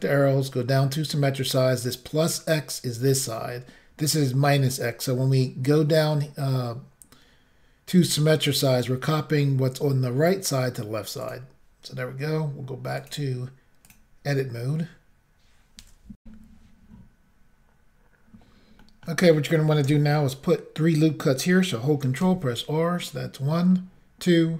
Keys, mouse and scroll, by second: 8.0 click, 11.3 click, 13.0 click, 13.9 click, 16.2 Insert, 18.8 middle click, 22.2 ctrl+r, 23.8-24.5 scroll up 1.